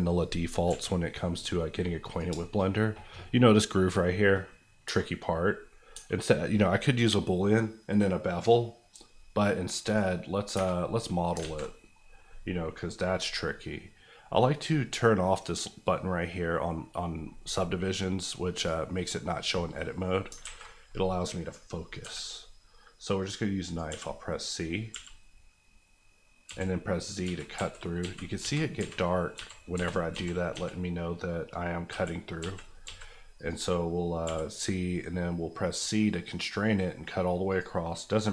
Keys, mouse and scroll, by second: 0.6 KP_1, 1.5 scroll up 1, 2.1 click, 2.3 shift+click, 2.3 shift+middle click, 2.6 middle click, 2.7 scroll up 1, 4.8 Tab, 6.2-9.4 scroll down 1, 9.8 click, 10.5 Tab, 10.9-11.3 scroll up 1, 11.4 alt+z, 11.7 scroll up 1, 18.5 click, 20.4 alt+a, 22.0 k, 23.6 click, 23.8 c, 26.4-30.5 typing, 31.9 z, 32.4 z, 32.8 z, 33.3 click, 34.2 c, 37.5 click.